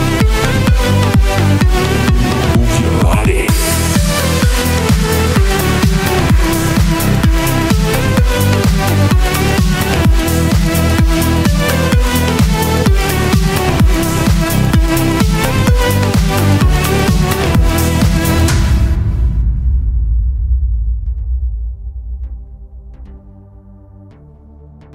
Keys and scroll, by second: 14.8 super+c, 15.8 super+v.